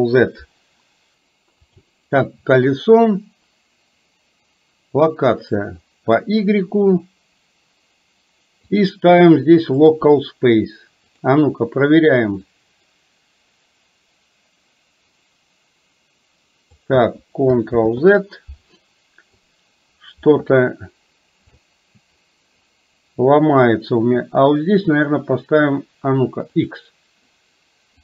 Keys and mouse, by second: 1.9 click, 8.8-10.1 drag, 11.1 click, 12.6-16.8 drag, 17.8 ctrl+z, 25.0-26.8 drag.